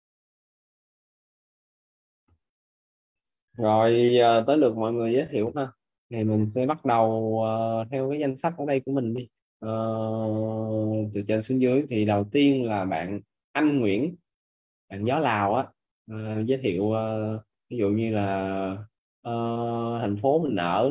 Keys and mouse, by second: 2.3 click, 7.9 click, 16.1 click.